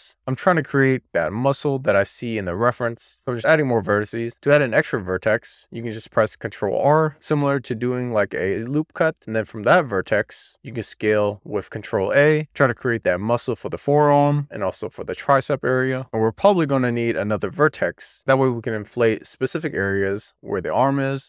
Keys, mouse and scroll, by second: 0.1 click, 0.1 click, 0.3 ctrl+a, 0.8 click, 0.9 alt+z, 1.0 alt+z, 1.7-2.0 scroll up 1, 2.0 click, 2.3 alt+z, 2.6 alt+z, 3.1 alt+z, 3.5 ctrl+r, 4.8-6.3 right drag, 6.4 alt+z, 7.3 alt+z, 8.2 alt+z, 9.1 ctrl+a, 13.2 click, 13.7 middle click, 14.3 alt+z, 14.5 alt+z, 14.8 ctrl+a, 16.0-21.2 middle drag.